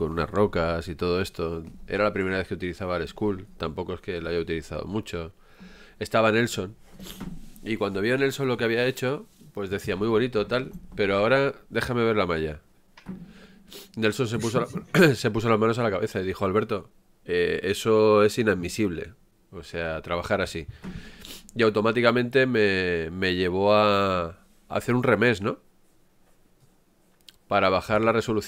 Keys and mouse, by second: 17.1-17.7 ctrl+z, 19.6 ctrl+z, 20.4 ctrl+z, 21.1-21.7 ctrl+z.